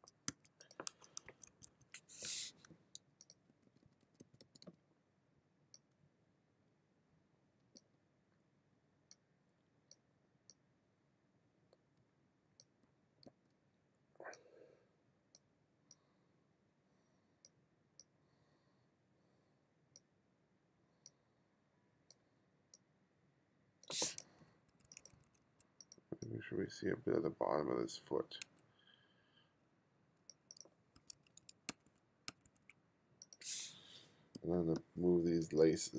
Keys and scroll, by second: 1.3 1, 3.5 b, 7.8 b, 12.9 b, 24.4 2, 31.7 2, 34.4 b, 35.0 b.